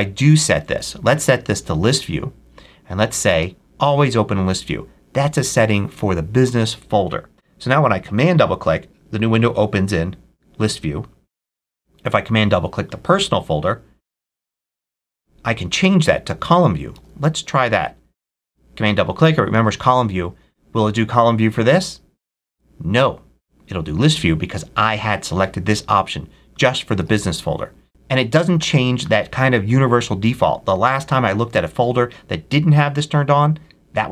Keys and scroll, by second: 10.5 super+w, 16.9 super+w, 17.9 super+w, 19.5 super+w, 27.0 super+w.